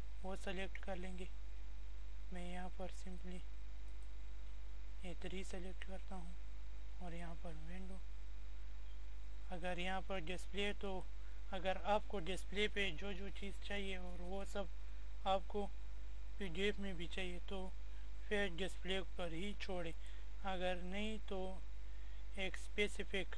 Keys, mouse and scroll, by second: 3.8 click, 7.1 click, 10.8 click, 19.9 click.